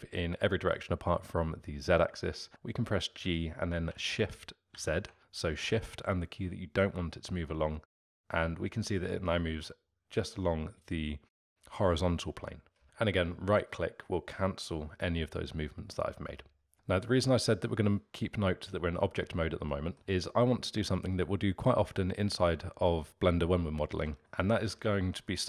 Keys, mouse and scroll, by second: 3.1 g, 16.7-18.0 middle drag, 19.7-23.0 middle drag, 24.1-25.4 alt+middle drag.